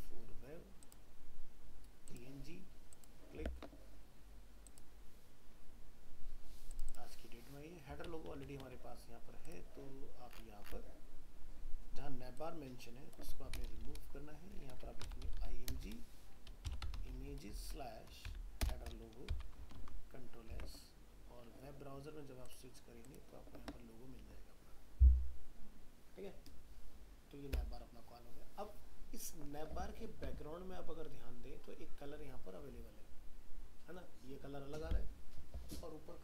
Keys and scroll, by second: 19.8 ctrl+s, 20.6 alt+Tab.